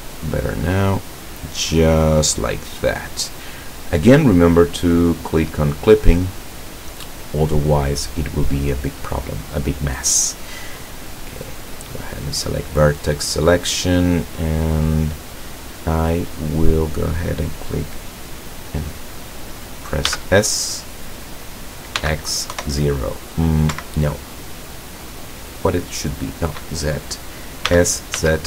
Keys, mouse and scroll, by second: 0.2-2.6 drag, 2.8 scroll down 1, 6.5-7.7 middle drag, 11.6 click, 13.5-16.8 middle drag, 20.2 s, 22.1 x, 22.6 KP_0, 23.8 Escape, 27.8 s, 28.2 z.